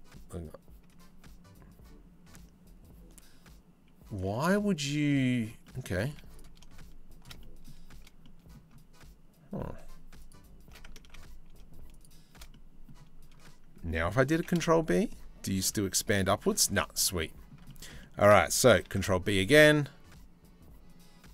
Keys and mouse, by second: 5.2 middle click, 5.7 z, 7.0 middle click, 7.8 middle click, 9.8 alt+shift+click, 10.6 ctrl+z, 11.6 click, 12.1 click, 13.9 ctrl+b, 16.3 z, 18.4 ctrl+b.